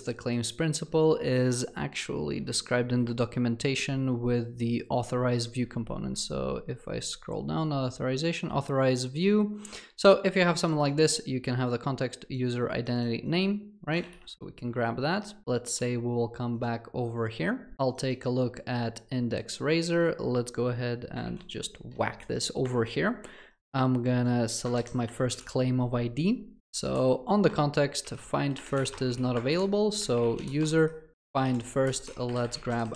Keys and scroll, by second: 21.3 ctrl+v, 26.6 ctrl+BackSpace, 31.2 Return.